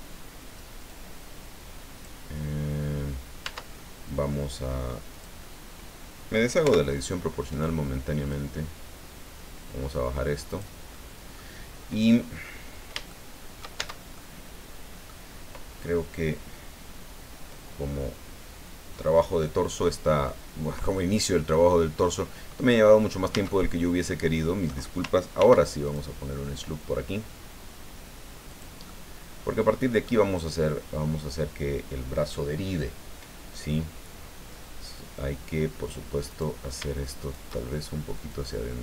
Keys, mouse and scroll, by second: 0.9-2.2 drag, 3.5 Tab, 5.1 click, 6.6 o, 7.5 right click, 8.3-10.8 drag, 10.9 middle click, 12.0-12.3 scroll down 1, 12.4 scroll up 1, 13.1 shift+middle click, 13.8 shift+Tab, 14.1-15.2 shift+middle drag, 20.3 middle click, 21.2 scroll down 2, 21.5-22.8 middle drag, 23.3 Tab, 24.1 middle click, 25.4 ctrl+r, 25.8 ctrl+click, 28.5 click, 28.8-30.2 middle drag, 36.3 right click, 37.2 shift+right click, 38.3-38.8 drag.